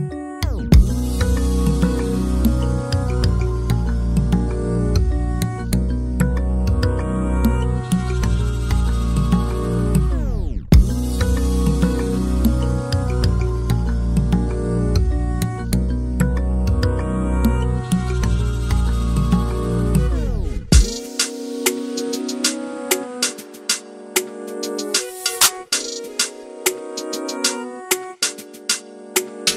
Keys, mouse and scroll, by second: 0.3-2.0 drag, 2.3 scroll up 1, 2.4 alt+a, 2.5 click, 3.1 scroll down 2, 3.2 scroll up 1, 3.4 middle click, 3.6 /, 3.9 /, 4.2 middle click, 4.5-4.9 scroll down 1, 5.7-8.2 drag, 8.4 middle click, 8.8-10.0 shift+right drag, 10.0 click, 10.3-13.0 shift+right drag, 13.0 KP_1, 13.2 KP_3, 13.7-15.9 shift+right drag, 15.9-17.1 middle drag, 17.1 KP_1, 17.3 KP_3, 18.2 click, 18.7 KP_Decimal, 19.0-19.6 scroll down 5, 19.2 middle click, 20.0 ctrl+KP_Add, 21.1 KP_3, 22.1 u, 22.9 g, 25.0 a, 25.6 click, 25.7-26.0 scroll up 1, 26.0 scroll down 1, 26.4 right click, 26.8-27.8 drag, 27.8 shift+f, 28.1 click.